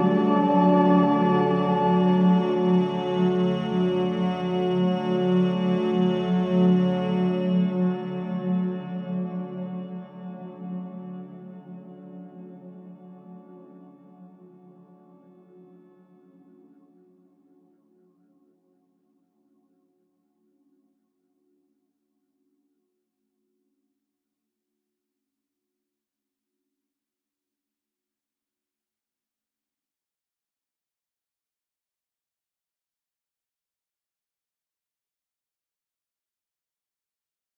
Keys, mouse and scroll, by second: 2.8 scroll down 1, 3.5 click, 4.2-5.7 typing, 6.0 Return, 6.9-8.3 drag, 8.1-8.9 typing, 9.0-9.3 scroll up 1, 10.1-11.9 drag, 11.9-12.3 scroll down 1, 13.1-15.7 drag, 15.5-17.0 typing, 17.4 Return, 18.1 click, 19.4 right click, 20.6-22.7 drag, 22.7 click, 23.7-25.0 drag, 25.0-25.4 scroll up 1, 35.1-36.2 typing.